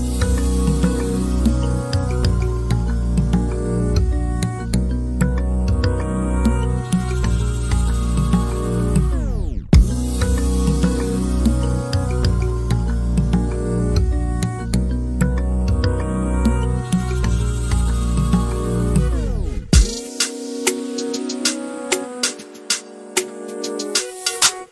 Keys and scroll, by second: 0.0-0.4 typing, 2.0-2.8 typing, 4.8 space, 9.7-11.1 typing, 14.1-15.8 typing, 17.5-18.3 typing, 19.3-22.6 typing.